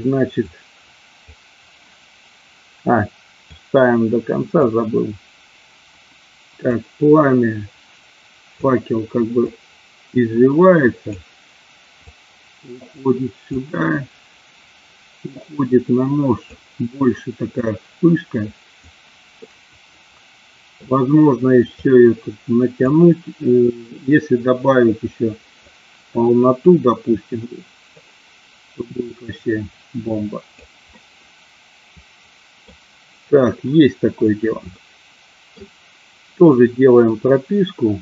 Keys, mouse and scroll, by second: 0.5 click, 3.6-4.9 drag, 6.8-8.8 drag, 9.6-11.3 drag, 12.3 click, 13.6-16.7 drag, 17.6-19.0 drag, 19.5-21.0 middle drag, 21.9-23.0 drag, 23.9-25.9 drag, 26.8-28.2 drag, 29.1-30.9 drag, 31.1-33.0 middle drag, 34.9 middle click.